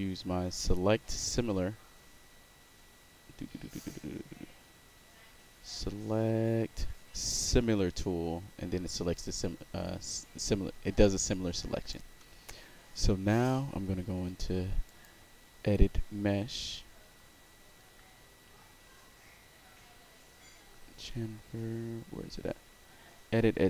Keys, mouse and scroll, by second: 1.1 click, 11.0-11.9 alt+right drag, 14.8 click.